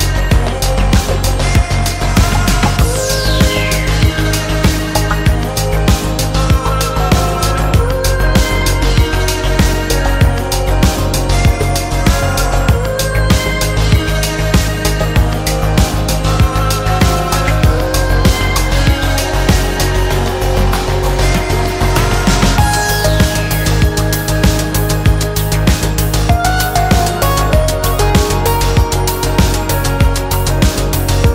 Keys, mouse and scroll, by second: 0.6 click, 1.6 click, 4.1 click, 5.1 click, 6.7 click, 7.8 click, 9.6 click, 10.3 click, 11.3 click, 12.8 click, 14.5 click, 15.9 click, 18.1 click, 21.7 click, 24.8 click, 27.7 click, 28.9 middle click, 28.9 scroll up 1, 29.6 middle click.